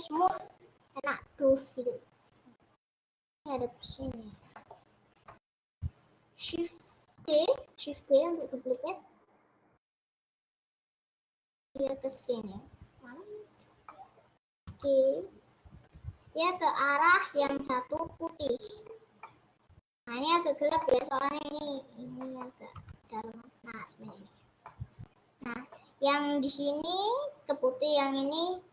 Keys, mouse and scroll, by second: 0.0-1.6 middle drag, 1.6 click, 4.6 middle click, 4.9-5.3 scroll down 3, 5.3 middle click, 5.9-6.3 scroll down 2, 7.1 shift+d, 11.4 Left, 13.8 scroll down 1, 13.9 middle click, 14.7 g, 16.7 click, 19.1 scroll up 4, 19.4-20.5 middle drag, 20.5 scroll down 1, 20.7-21.7 middle drag, 21.7 click, 22.1 middle click, 22.7 g, 24.2-24.5 scroll up 6, 24.5-25.9 middle drag, 25.9-26.5 scroll down 3, 26.5 click, 28.4 click.